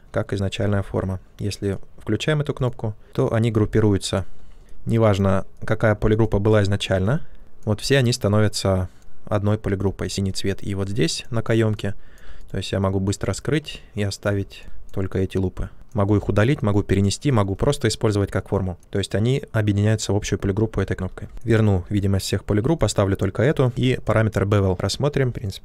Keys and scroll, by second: 0.5 ctrl+z, 21.3 ctrl+z.